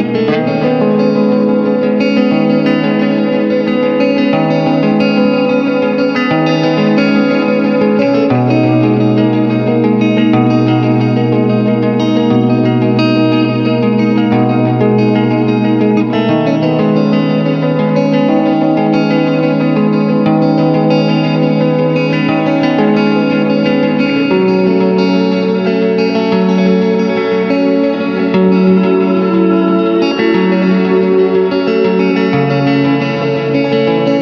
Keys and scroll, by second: 0.7 space, 4.0 space, 5.4 space, 6.0 w, 6.7 space, 7.0 ctrl+alt+d, 7.4 Return, 8.1 shift+F2, 8.6 space, 9.4 ctrl+b, 10.2 Return, 10.9 space, 13.0 Return, 13.7 ctrl+m, 15.7 Return, 16.2 ctrl+d, 16.4 ctrl+KP_Subtract, 16.6 ctrl+y, 17.2 Return, 23.9 alt+space, 24.5 alt+i, 24.5-25.5 typing, 28.4 Return, 29.0 ctrl+KP_Subtract, 29.6 w, 29.8 Return, 31.6 c, 32.6 space, 33.2 Return, 33.8 ctrl+KP_Add.